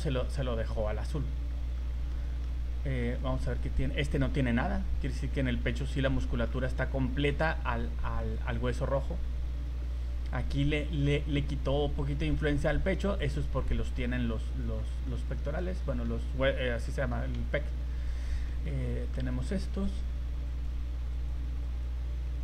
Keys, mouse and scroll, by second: 1.5 shift+middle click, 1.8-2.1 scroll down 3, 2.1 middle click, 3.1 right click, 3.5 right click, 4.1 shift+middle click, 4.5 scroll up 2, 5.3 right click, 6.2 middle click, 7.3 right click, 8.2 right click, 8.8 middle click, 9.1 scroll down 1, 9.4 middle click, 10.6 middle click, 11.4 scroll up 2, 13.1 right click, 14.5 right click, 14.7 scroll down 3, 15.0 middle click, 16.0 middle click, 16.8 middle click, 18.1 right click, 18.5 shift+middle click, 18.8 middle click, 20.5 right click, 21.1 right click, 21.7 right click.